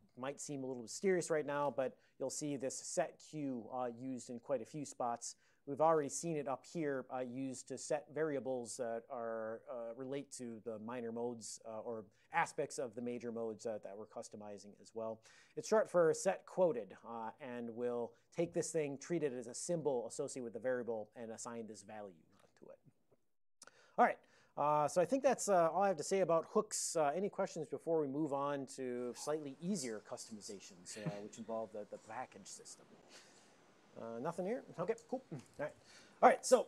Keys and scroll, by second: 2.2 alt+b, 2.4 alt+b, 2.6 alt+b, 2.8 alt+b, 3.2 alt+b, 5.5 alt+v, 23.0 ctrl+a, 24.0 ctrl+v, 25.1 alt+n.